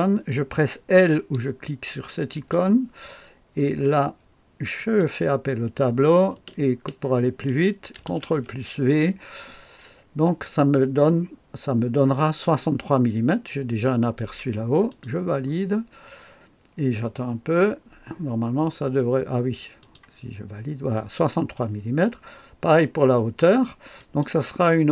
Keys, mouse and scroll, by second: 2.3 i, 4.7 click, 7.9 ctrl+v, 9.0 typing, 14.0 click, 14.8 click, 19.7 click, 23.9 click.